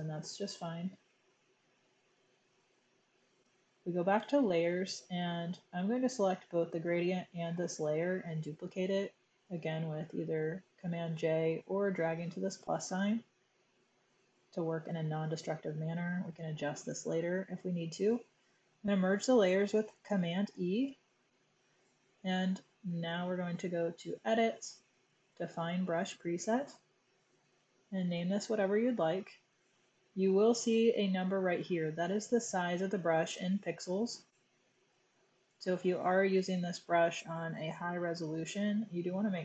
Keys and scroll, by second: 20.0 super+e, 26.5-28.1 typing.